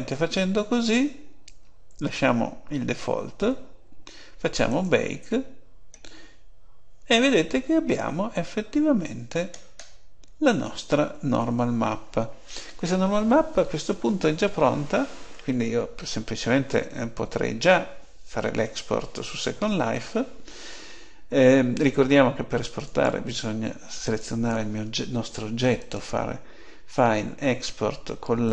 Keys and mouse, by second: 9.4-11.5 middle drag, 22.9-24.5 right drag.